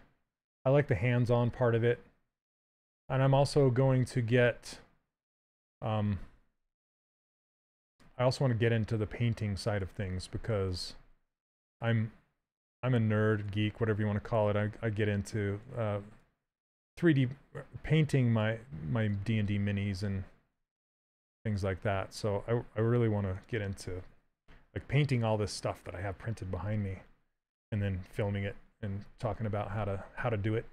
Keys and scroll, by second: 6.2 w.